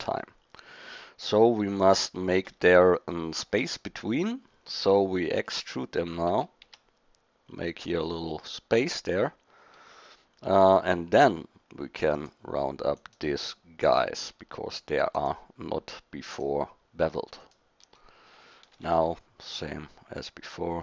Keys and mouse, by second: 2.9-6.3 middle drag, 6.3 e, 11.1-13.0 drag, 13.0-14.0 middle drag, 14.0 click, 18.8 ctrl+b.